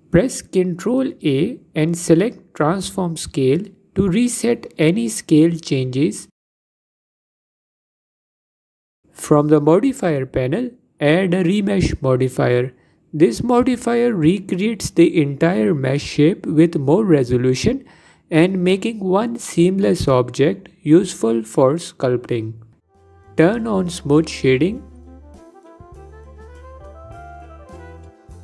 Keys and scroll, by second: 5.2 ctrl+a, 7.2 ctrl+a, 15.4 F4, 19.3 F4.